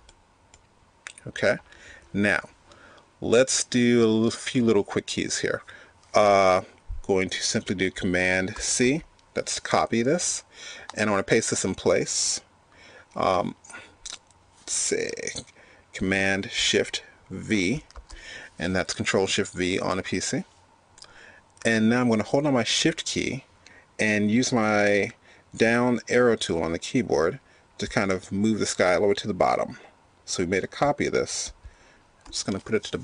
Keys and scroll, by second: 8.1 super+c, 16.5 shift+super+v.